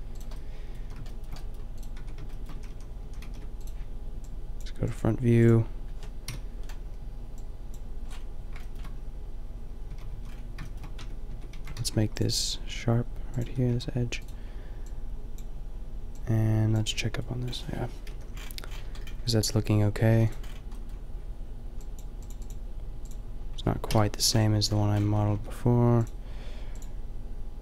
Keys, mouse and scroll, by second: 0.1 middle click, 0.9 a, 2.0 Tab, 2.6 a, 3.0 a, 3.3 ctrl+r, 4.5 click, 6.2 KP_5, 9.9 a, 10.2 a, 11.0 Tab, 11.3 Tab, 11.5 a, 11.7 ctrl+r, 13.5 Tab, 13.8 a, 18.2 KP_5, 20.2 a, 20.3-21.8 middle drag, 21.8-22.3 scroll up 1, 22.3 click, 23.1 a, 23.9 KP_5, 25.0 Tab, 25.3 Tab.